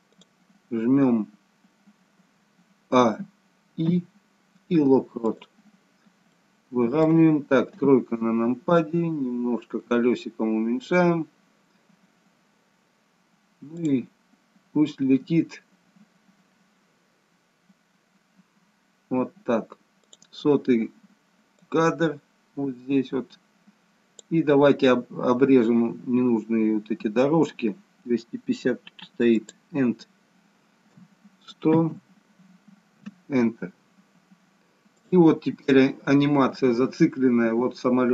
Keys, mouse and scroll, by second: 0.3 click, 3.3 a, 5.6 a, 5.6 i, 6.4 middle click, 7.8 KP_3, 8.8-9.9 scroll down 2, 9.9-10.5 scroll down 1, 10.5 scroll up 1, 13.8 click, 20.1 click, 21.8 click, 29.5 click, 31.9 0, 35.0 click.